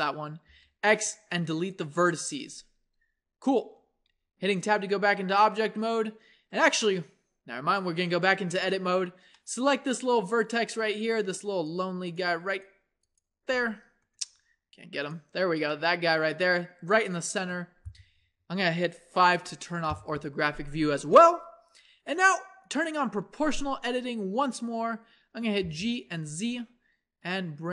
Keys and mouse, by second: 0.5 x, 3.6 Tab, 4.8 z, 8.3 Tab, 10.4-15.7 drag, 15.9-17.4 middle drag, 17.4 KP_1, 19.4 KP_5, 25.6 g.